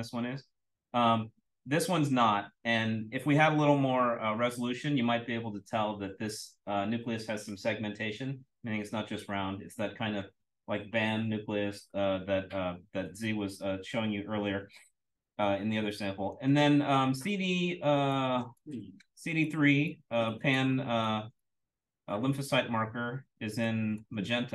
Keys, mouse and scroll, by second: 16.2 click, 16.7-18.1 scroll down 1, 18.1-18.5 drag, 18.9-20.2 scroll up 1, 19.4-19.8 drag, 20.2 drag, 20.4-21.6 scroll up 1, 21.0-21.3 drag, 21.6-22.1 scroll down 1, 22.1-22.6 scroll down 1, 22.6-23.5 scroll down 1, 23.5-24.3 scroll down 1, 23.6-23.9 drag, 24.3-24.5 scroll up 1.